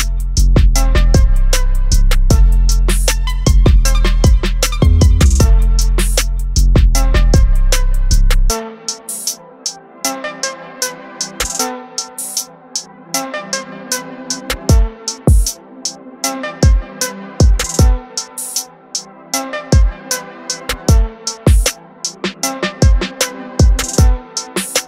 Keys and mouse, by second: 1.7 click, 5.2 click, 7.5 click, 13.0 click, 19.1 click, 21.1 click.